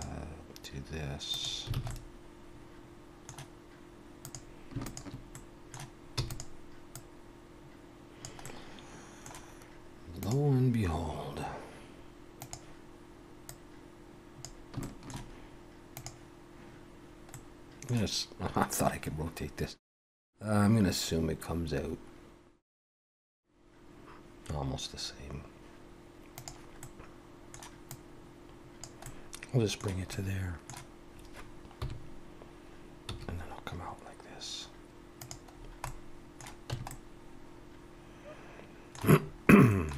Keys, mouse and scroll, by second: 1.7 alt+a, 1.9 middle click, 4.2 click, 4.8 shift+click, 5.3 middle click, 6.2 e, 6.9 click, 13.5 click, 14.8 shift+middle click, 26.8 middle click, 27.9 click, 29.0 middle click, 30.1 middle click, 31.8 KP_7, 33.1 e, 35.6-36.1 scroll down 3, 35.8 middle click, 36.7 Tab, 36.9 middle click, 39.2 scroll up 2, 39.7 shift+middle click.